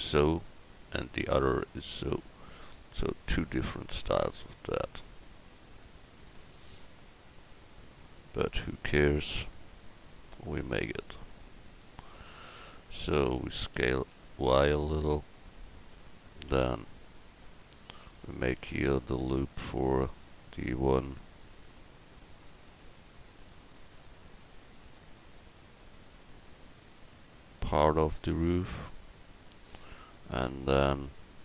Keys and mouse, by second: 13.8 s, 16.5 Tab, 19.5 ctrl+t, 22.8 ctrl+z, 25.0 ctrl+r, 30.1-31.4 middle drag.